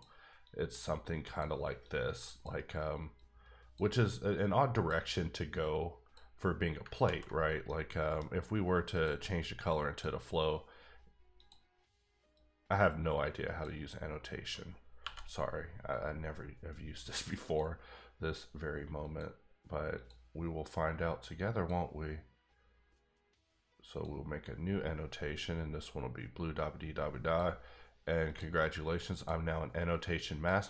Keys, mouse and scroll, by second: 0.4 click, 1.8 click, 3.4 click, 4.3 click, 5.9 click, 7.0 ctrl+z, 7.6 middle click, 8.9 click, 9.7 click, 11.3 click, 12.4 click, 15.0 n, 17.4 click, 19.0 click, 21.5 click, 23.9 click, 26.9 click, 28.2 click, 28.8 click, 30.3 click.